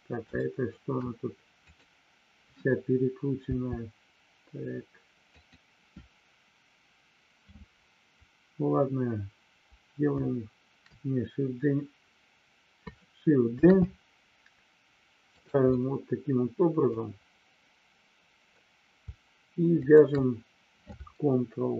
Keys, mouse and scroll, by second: 0.3 shift+middle click, 1.6 click, 5.2 click, 15.2 click, 15.7-17.0 middle drag, 19.7 shift+click.